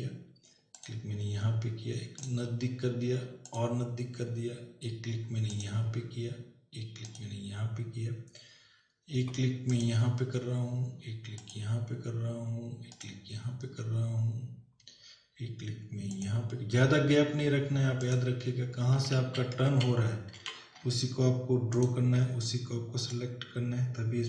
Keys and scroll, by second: 19.5 ctrl+z.